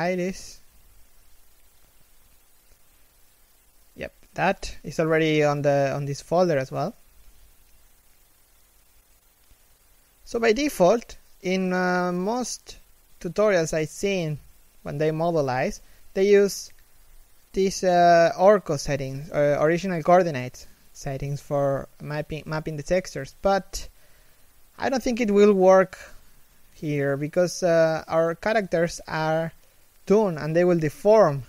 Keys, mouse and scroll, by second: 11.1-11.6 scroll up 2, 11.2 alt+z, 11.9 shift+middle click, 13.3 1, 13.7 scroll down 1, 27.9-28.3 scroll down 1, 28.5 middle click, 29.0 KP_1, 29.3 s.